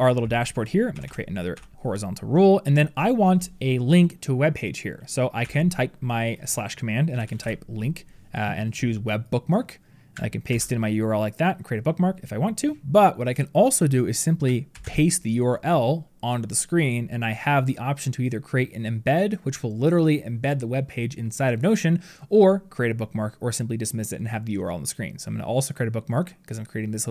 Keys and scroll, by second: 10.3 ctrl+v, 14.6 ctrl+v.